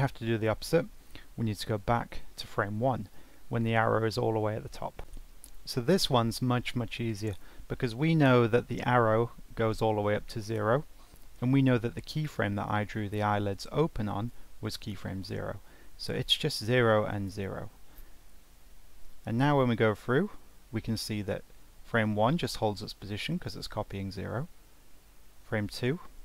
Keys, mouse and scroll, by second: 1.8-4.9 drag, 25.2-26.2 scroll down 1.